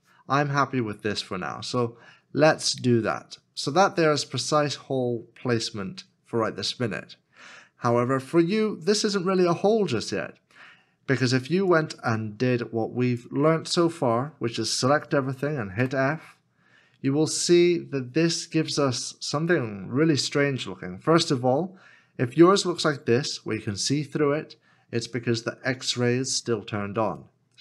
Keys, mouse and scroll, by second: 9.7-11.4 scroll down 1, 16.8 f, 17.6 middle click.